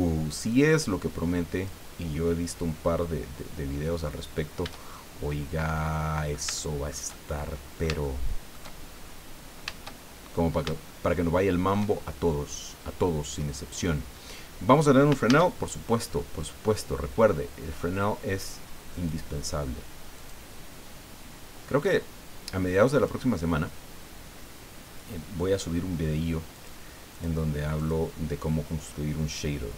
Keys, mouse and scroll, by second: 0.5-1.8 drag, 3.4 scroll down 2, 4.2 scroll down 2, 5.0-7.1 shift+drag, 7.2-8.2 shift+drag, 8.2 shift+middle click, 8.9-9.2 shift+scroll up 3, 10.1 shift+scroll down 2, 10.8-11.8 shift+middle drag, 15.3 shift+a, 18.9 click, 20.1 click, 21.8-23.3 drag, 26.5 click, 27.1 click, 27.7 click.